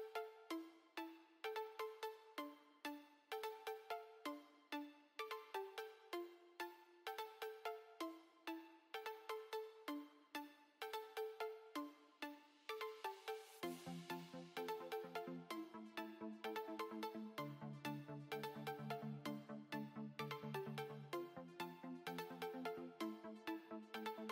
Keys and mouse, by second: 2.0 ctrl+r, 2.7 ctrl+r, 2.7 b, 5.4 b, 6.2 b, 7.6 Tab, 7.9 KP_7, 9.3 KP_3, 9.7 KP_1, 10.2 z, 11.4 KP_1, 11.7 z, 13.8-16.6 typing, 16.9 Tab, 18.0 Tab, 18.7-20.6 typing, 21.1 ctrl+r, 21.8-23.0 typing, 22.8 ctrl+r, 24.0-24.3 typing.